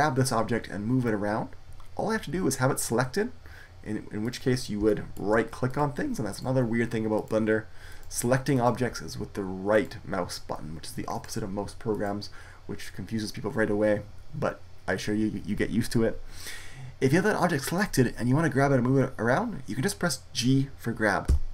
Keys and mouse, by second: 4.1-13.6 right drag, 17.6 right click, 18.4 click, 19.1-21.2 right drag, 21.2 g.